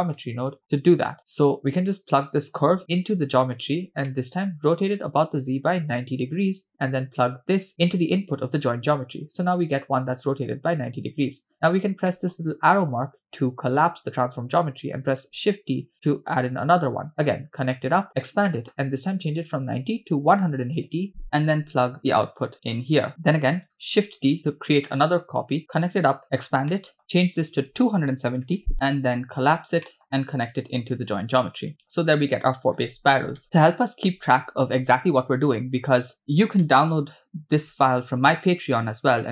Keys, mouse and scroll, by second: 2.2-3.7 drag, 4.1 middle click, 5.0-6.4 drag, 7.7 middle click, 12.1 middle click, 13.7 click, 15.2 shift+d, 17.1-18.0 drag, 18.5 middle click, 19.4-20.8 drag, 21.5 middle click, 22.4-23.1 drag, 23.1 ctrl+z, 23.8 shift+d, 25.9-26.2 drag, 26.3 click, 26.7 middle click, 27.4-29.2 drag, 29.3 click, 29.9 middle click, 31.4 drag, 32.7-33.1 scroll down 2, 35.4-35.9 scroll up 2, 36.0 middle click, 38.8-39.3 drag.